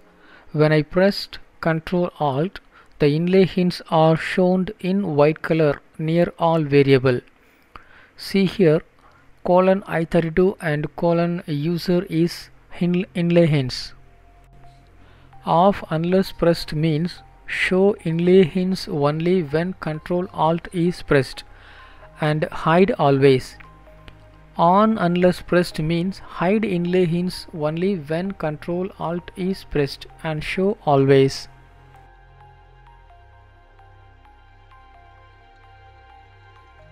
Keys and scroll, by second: 0.0 Up, 0.1 Up, 1.5 Return, 19.6 Left, 20.9 shift+Left, 22.0 Delete, 22.5 ctrl+space, 24.1 Down, 24.3 Down, 27.6 ctrl+s.